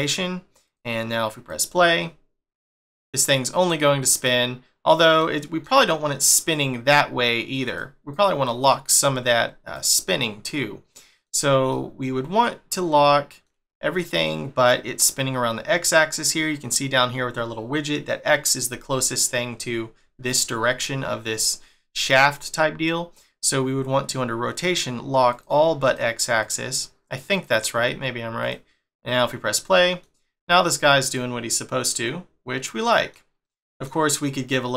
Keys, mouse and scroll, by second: 0.6 click, 1.5 click, 5.3 middle click, 7.8 click, 8.1 click, 8.7 middle click, 9.7 click, 10.5 middle click, 25.3 click, 25.8 click, 26.4 click, 27.3 click, 28.4 click, 29.6 middle click, 31.1 middle click, 33.5 middle click.